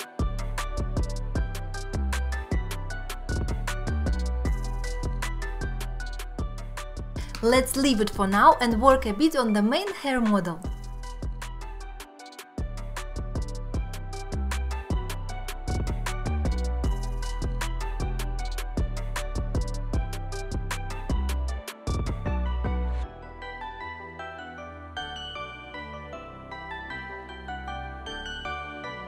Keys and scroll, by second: 1.8 alt+q, 2.0 Tab, 2.3 Tab, 2.4 alt+q, 2.9 alt+z, 4.8 Tab.